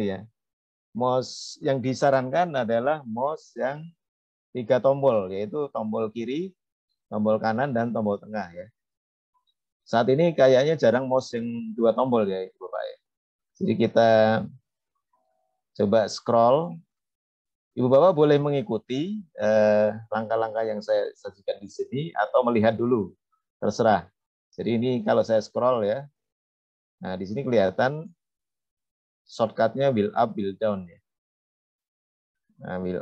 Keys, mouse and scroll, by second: 24.9 click, 25.6-26.4 scroll up 2, 26.4 scroll up 1, 27.0-28.0 scroll down 4, 28.0-28.5 scroll up 1, 31.7 scroll down 1, 32.2-33.0 scroll up 4.